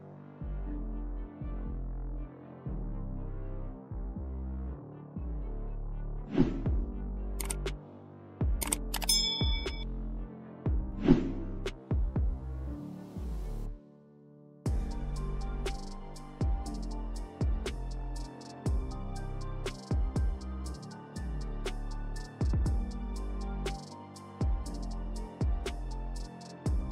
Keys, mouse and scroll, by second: 3.2 click, 4.9 click, 7.9 space, 8.0 click, 8.2 space, 8.6 click, 16.5 click, 17.9 click, 20.1 ctrl+space, 20.2 ctrl+click, 20.4 ctrl+space, 20.8 click, 23.6 click, 23.9 ctrl+space, 24.1 ctrl+click, 24.2-24.6 ctrl+space, 24.8 click, 24.9 space.